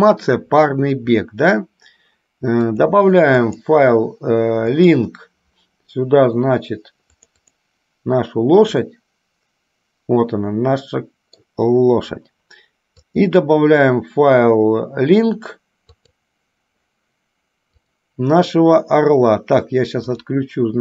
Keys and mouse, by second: 2.7 click, 3.5-5.4 drag, 9.1-11.6 middle drag, 13.3-16.7 drag, 20.4 click.